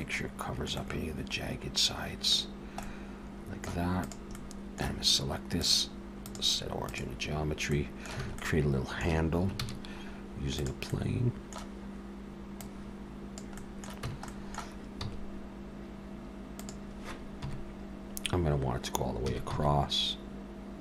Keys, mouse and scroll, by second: 0.0 middle click, 0.7 middle click, 2.4-2.8 scroll down 3, 2.8 middle click, 4.0 click, 4.3 middle click, 5.6 click, 7.5 scroll up 2, 7.7 middle click, 8.2 alt+a, 8.4 middle click, 9.6 shift+a, 10.9 middle click, 12.6 click, 13.6 middle click, 14.0 Tab, 14.3 middle click, 15.0 s, 17.4 KP_7, 19.3 s.